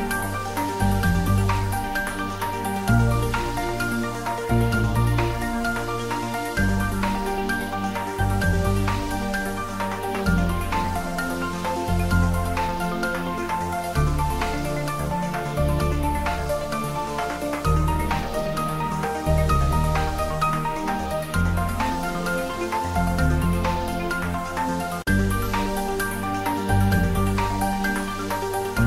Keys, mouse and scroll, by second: 0.1 g, 3.2 click, 3.4 shift+z, 3.7-5.9 middle drag, 5.9 s, 6.5 click, 6.9 ctrl+middle click, 7.3 shift+middle click, 8.0 Tab, 8.7 ctrl+middle click, 9.8-11.0 ctrl+middle drag, 11.0 ctrl+r, 11.4 click, 12.0 s, 13.3 click, 13.4 Tab, 13.6 middle click, 14.5 Tab, 15.1 ctrl+r, 16.3 click, 16.7 d, 17.1 click, 17.5 s, 18.5 click, 18.6 Tab, 19.2-21.0 middle drag, 21.0 click, 21.6 ctrl+middle click, 22.7 r, 23.7 click, 24.0 g, 25.2 click, 25.6 middle click, 26.4-27.4 typing, 27.7 click.